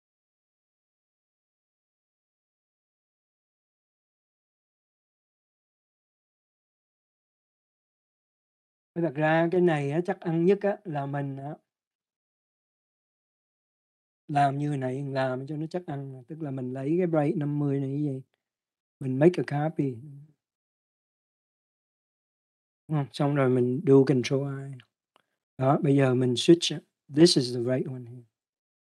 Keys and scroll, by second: 15.7 ctrl+d, 25.1 ctrl+i.